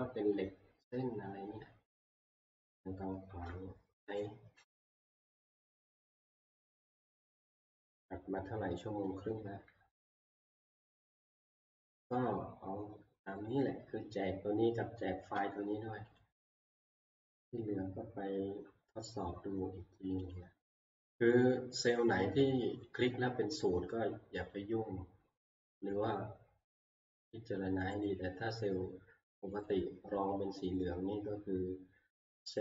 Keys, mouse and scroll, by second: 2.3 click, 3.3 alt+Tab, 10.9 shift+middle click, 13.5 click, 15.8 shift+scroll, 16.2 click, 17.4 click, 20.4 click, 22.4 click, 22.7 click, 22.8 click, 24.5 click, 26.1 click, 28.1 click, 28.7 click, 29.7 click, 30.7 click.